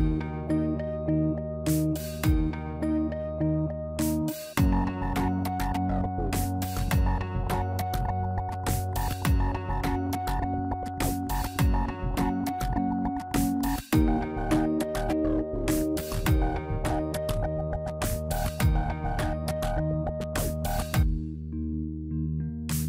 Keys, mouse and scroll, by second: 1.1 n, 1.8-2.1 scroll down 1, 2.2 shift+middle click, 3.1 scroll down 1, 4.3 click, 5.0 shift+middle click, 7.3 click, 8.5 click, 9.9 shift+click, 10.3 shift+middle click, 10.7 scroll up 1, 11.8 shift+middle click, 11.8-12.3 scroll up 4, 13.3 shift+click, 13.7 shift+middle click, 15.7 shift+click, 16.1-16.7 scroll down 5, 16.5 shift+middle click, 17.9 scroll down 1, 18.1 middle click, 18.4 Tab, 19.1 ctrl+a, 20.4 Tab, 21.6 ctrl+b.